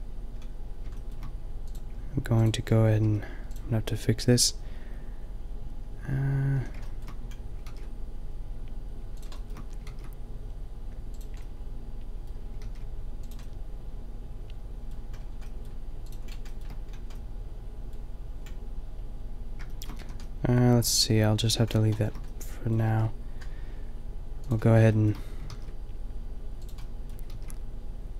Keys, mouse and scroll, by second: 3.1 g, 6.5 a, 7.7 ctrl+r, 9.9 ctrl+r, 11.5-12.7 drag, 12.7 ctrl+r, 15.1 middle click, 16.7-19.2 shift+middle drag, 20.0 a, 22.8 ctrl+r, 24.6 middle click, 25.5 ctrl+r, 25.7 middle click, 27.3 ctrl+r.